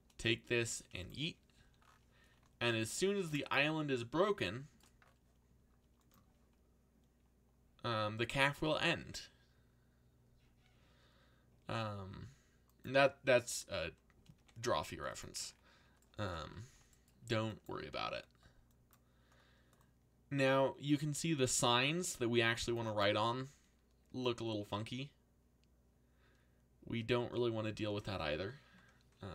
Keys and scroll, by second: 0.5 g, 1.5 c, 14.3 g, 14.6 x, 17.7 c.